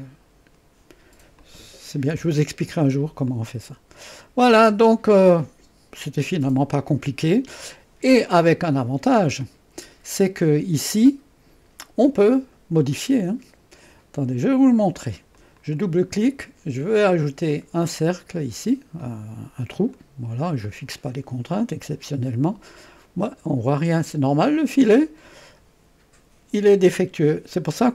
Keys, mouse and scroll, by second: 1.4-2.4 drag, 3.3-5.2 drag, 6.8-8.2 drag, 8.3-12.3 drag, 15.3 click, 17.5 click, 19.0-20.2 drag, 21.5 click, 22.0-24.2 drag, 24.8 click.